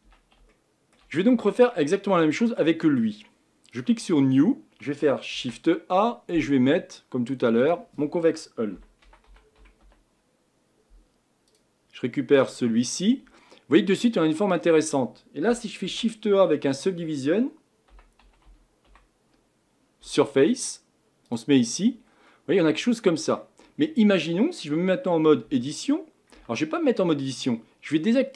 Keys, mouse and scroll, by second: 0.0 Tab, 0.5-3.8 shift+middle drag, 3.8-11.6 drag, 13.3-14.6 middle drag, 14.6-15.7 scroll up 1, 15.7-16.2 scroll up 1, 16.2-19.8 scroll up 1, 19.8-20.7 scroll up 1, 22.3-23.6 middle drag, 23.6-23.9 scroll up 4, 23.9-24.5 scroll down 3, 25.5 Tab, 26.3 Tab, 27.0-27.5 middle drag, 27.5 scroll up 1.